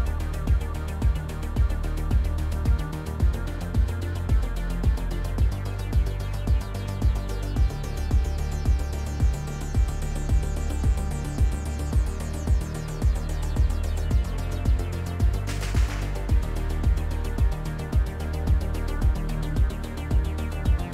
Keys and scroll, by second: 9.6 ctrl+z, 16.2 s, 16.6 x, 17.9-20.5 typing.